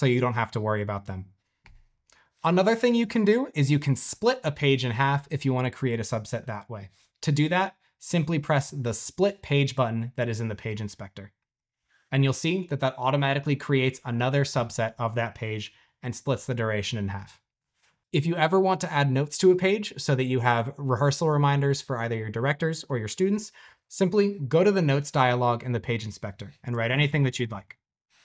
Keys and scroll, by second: 26.3-28.2 typing.